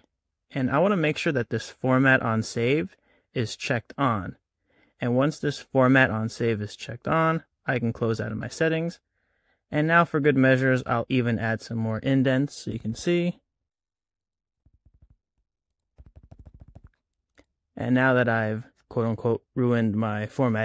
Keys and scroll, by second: 12.6 Tab.